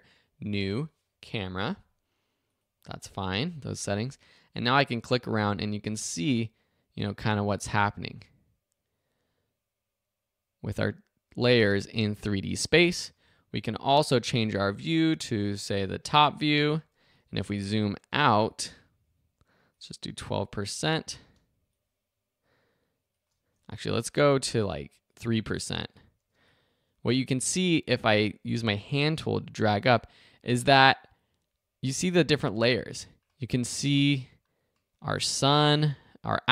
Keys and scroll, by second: 13.0 super+z, 21.3 space, 26.3 space.